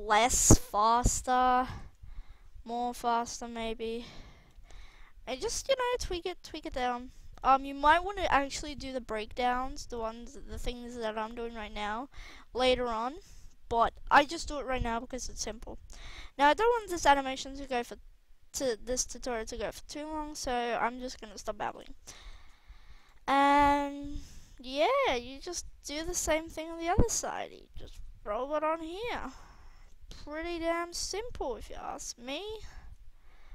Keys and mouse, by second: 0.1 i, 1.6 alt+a, 2.5 alt+a, 7.0 r, 9.5 r, 11.3 alt+a, 12.2 alt+a, 13.6 KP_3, 20.1 click, 22.3 drag, 23.0-23.6 right drag, 23.6-24.7 drag, 25.5 g, 26.7 r, 27.9 g, 29.2 r, 30.9 g, 31.8 r, 32.8 g.